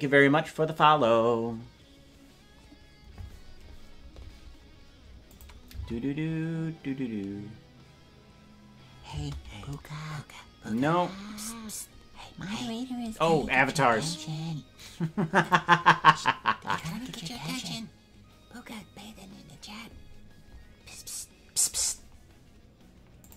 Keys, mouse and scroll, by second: 5.3 click, 5.7 space, 9.2 space.